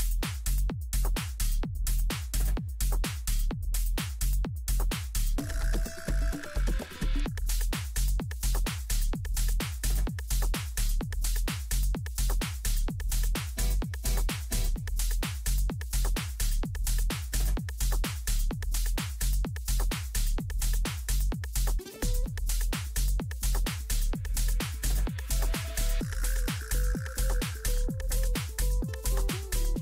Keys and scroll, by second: 0.7 Down, 22.5 space.